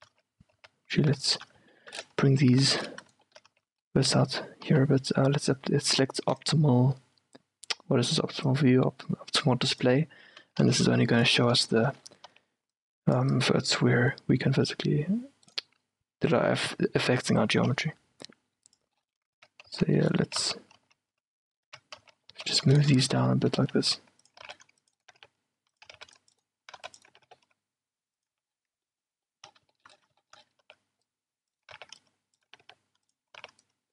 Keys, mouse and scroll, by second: 0.3 z, 0.6 z, 2.5-4.7 typing, 3.2-5.9 middle drag, 6.5-8.2 drag, 8.6 click, 9.4 middle click, 9.7-10.7 drag, 10.7 z, 11.1-14.3 middle drag, 12.4 c, 15.9-19.3 drag, 19.3-22.1 middle drag, 19.5 Tab, 19.8 z, 20.5 z, 20.9 z, 21.8 Tab, 22.1 z, 22.4 z, 22.6 middle click, 23.6-27.2 typing, 25.1-27.1 drag, 27.2-29.0 drag, 28.4 a, 29.0-32.5 middle drag, 30.8-33.9 typing, 32.5-33.9 drag.